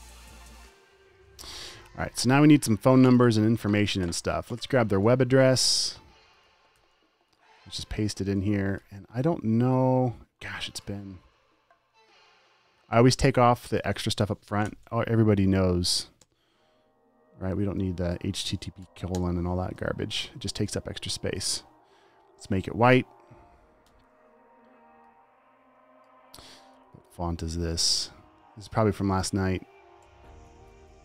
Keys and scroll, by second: 5.4 super+c, 7.2 t, 8.1 super+v, 9.1 super+t, 16.2 Delete, 19.2 Delete, 20.1 v, 24.2 super+BackSpace, 24.3 v, 27.3-28.0 typing, 28.8 super+a, 30.4 ctrl+alt+super+Left.